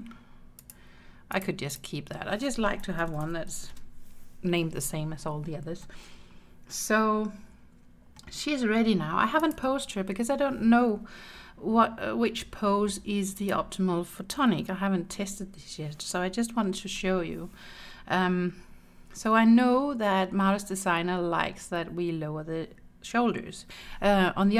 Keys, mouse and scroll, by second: 0.6 click, 1.4 click, 1.8-3.8 drag, 5.9-8.2 middle drag, 9.5 click, 11.3 Tab, 13.4 click, 16.8 KP_1, 17.8-18.6 scroll down 1, 18.6-19.9 scroll up 1.